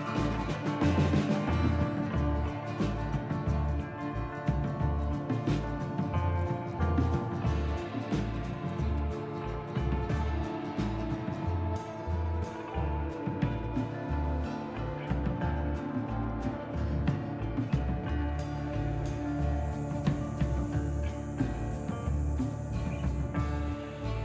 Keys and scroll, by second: 13.2 a, 13.7 u.